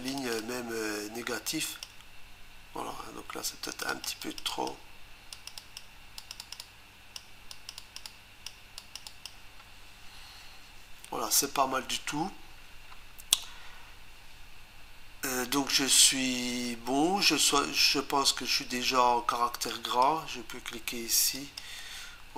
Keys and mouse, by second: 0.2 click, 0.3 double click, 0.4 click, 3.6 click, 3.9 click, 4.0 double click, 4.2 click, 4.5 click, 4.6 double click, 5.3 click, 5.8 double click, 6.2 click, 6.4 click, 6.5 double click, 6.6 click, 7.5 click, 7.8 click, 8.0 double click, 8.0 click, 8.8 click, 9.0 click, 19.7 click, 21.4 click.